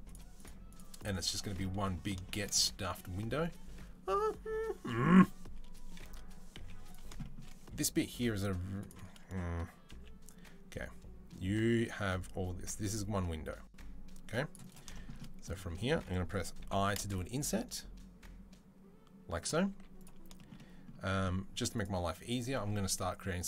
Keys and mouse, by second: 0.8 shift+middle click, 0.8 shift+right click, 1.3 right click, 2.0 shift+click, 2.3-14.6 right drag, 5.8 KP_3, 6.4 z, 8.7 click, 8.7 middle click, 9.7 c, 14.6-22.1 shift+middle drag, 16.4 i, 19.5 z, 21.5 click, 22.1 click, 22.1-23.2 middle drag, 23.2 click.